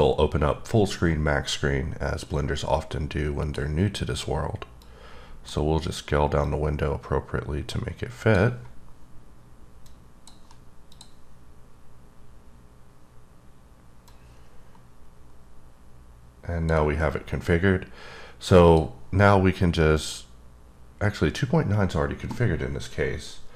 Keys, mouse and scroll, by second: 2.3 click, 4.8 click, 6.4 click, 10.9 click, 14.1 click, 18.6 click, 19.9 click.